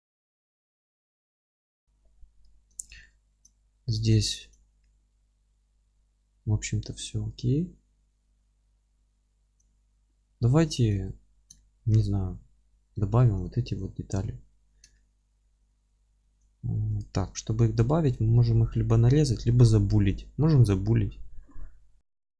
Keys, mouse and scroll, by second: 0.8 scroll down 1, 2.1-2.6 scroll down 1, 2.6 alt+middle click, 2.9 click, 3.0 alt+q, 3.3 alt+middle click, 3.6 scroll up 1, 4.2 alt+middle click, 4.6 scroll up 1, 4.8 middle click, 6.3-6.6 scroll down 1, 9.2 middle click, 9.4 scroll up 1, 9.7 alt+middle click, 11.3 scroll up 1, 11.6 alt+middle click, 12.1-13.0 scroll down 1, 13.0 alt+middle click, 14.2 alt+q, 15.0 alt+middle click, 16.6-17.0 middle drag, 16.6-17.0 scroll up 1, 17.0 click, 17.1 Tab, 17.9 scroll down 1, 18.2-22.0 middle drag, 18.4 scroll up 1, 18.6 Tab, 22.0 scroll up 1, 22.2 shift+a.